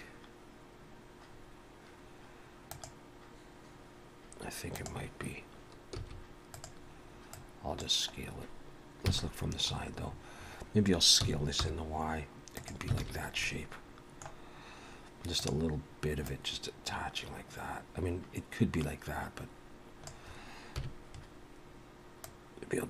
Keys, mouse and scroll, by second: 1.3-2.0 scroll down 2, 6.0 s, 7.4 click, 9.1 KP_3, 9.7-11.2 scroll up 10, 11.2-11.7 scroll up 1, 11.2 s, 13.0 alt+a, 13.1-13.4 scroll down 3, 13.4 middle click, 15.4 click, 16.3 click, 20.7 KP_1, 22.2 click.